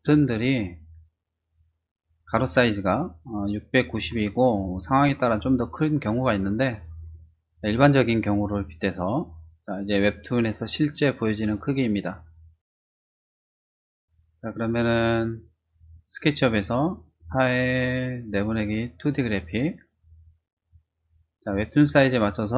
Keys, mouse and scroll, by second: 3.2 click, 4.7 click, 5.3 click, 10.0 click, 15.9 click, 22.4-22.5 typing.